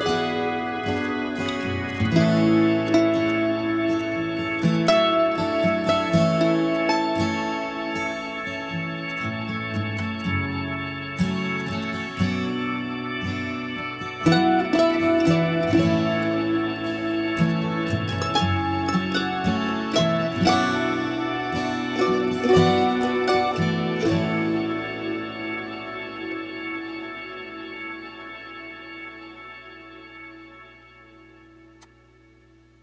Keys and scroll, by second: 8.4 ctrl+x, 8.9 Escape, 9.3 Escape, 9.5 Escape, 9.6 Escape, 13.0 alt+h.